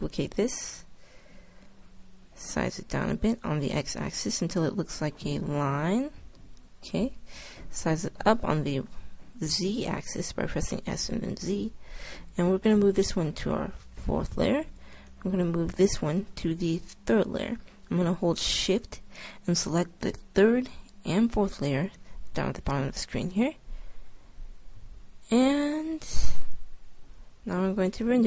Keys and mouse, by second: 1.3 s, 3.3 s, 7.9 s, 13.0 m, 15.0-16.8 drag, 16.3 m, 20.5-22.4 drag, 25.1 middle click, 26.0 click.